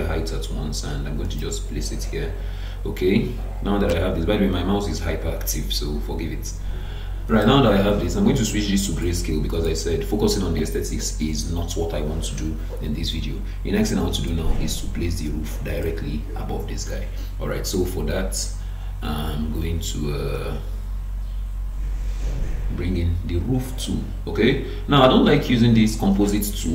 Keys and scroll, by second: 3.9 Escape.